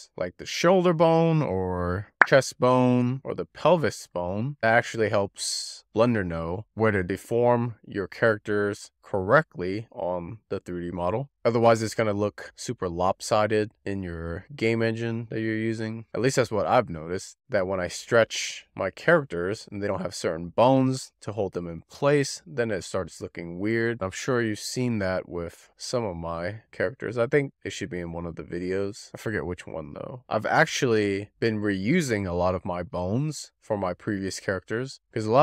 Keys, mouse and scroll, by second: 0.8 click, 1.2 click, 2.0 shift+click, 2.1 alt+middle click, 2.2 scroll up 4, 2.4 click, 2.6 Tab, 2.8 shift+middle click, 3.3 click, 3.5 d, 7.0 click, 7.9 click, 8.1 click, 8.3 click, 8.9 click, 9.1 click, 10.6 middle click, 12.1 alt+middle click, 12.5 scroll up 4, 13.3 click, 13.5 shift+click, 13.6 shift+click, 13.9 click, 15.2-15.5 scroll down 4, 15.5 shift+middle click, 15.9 click, 16.3 click, 16.9 shift+click, 17.4 click, 19.0-19.3 scroll up 4, 19.3 click, 19.8 click, 20.1 click, 21.1 click, 21.3 click, 22.3 click, 22.6 click, 23.2 click, 23.4 click, 24.4-24.8 scroll down 1, 24.8 click, 25.3-26.3 drag, 26.8 click, 29.1-29.4 scroll up 3, 29.4 scroll down 2, 29.9-31.0 drag, 31.2 click, 31.8 scroll down 1, 31.9-32.4 shift+middle drag, 32.4 scroll up 2, 32.5 click, 32.7 click, 33.2 click, 34.2 click, 34.4 click, 35.3 click.